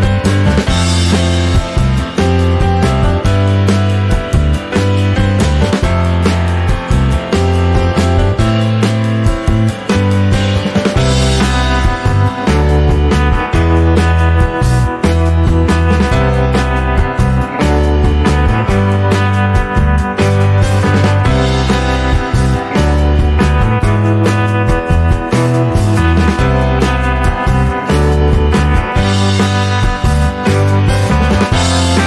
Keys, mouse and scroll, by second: 1.5 click, 1.8-2.9 scroll down 3, 2.9-5.2 drag, 5.2 middle click, 5.8 click, 6.4 shift+a, 8.3 click, 8.4 shift+a, 12.1 scroll up 3, 12.3 middle click, 12.8-13.2 scroll up 1, 13.2-17.8 drag, 18.5-21.7 middle drag, 21.7-24.3 drag, 28.5-32.0 drag.